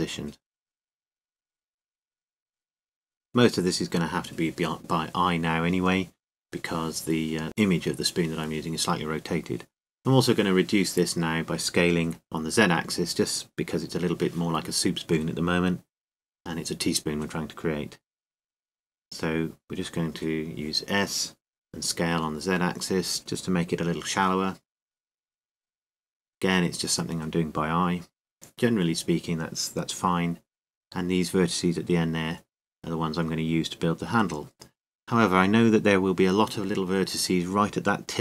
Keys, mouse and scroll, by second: 0.8-6.1 drag, 6.1 z, 6.8 z, 12.2 a, 13.7 Tab, 14.9 a, 15.4 Tab, 18.0 a, 20.5-24.4 right drag, 21.2 a, 22.3 s, 25.1 click, 25.5 Tab, 25.9 Tab, 26.7 KP_7, 30.0 Tab, 33.1 click, 36.6 z, 37.1 c.